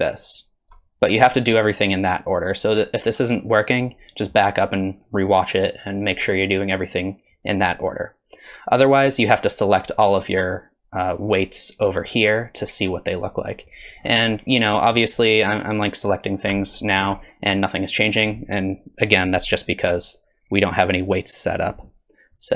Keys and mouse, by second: 9.6 click, 14.8 middle click, 16.6 ctrl+click.